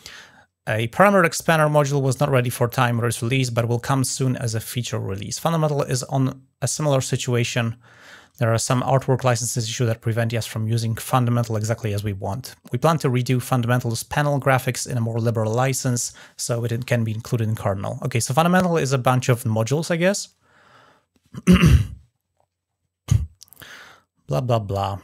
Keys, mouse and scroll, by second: 1.6 click, 2.1 click, 8.4 click, 8.9 drag, 21.7 scroll down 1, 22.4-22.7 scroll down 1, 23.2 scroll down 1, 24.5-24.9 scroll down 2.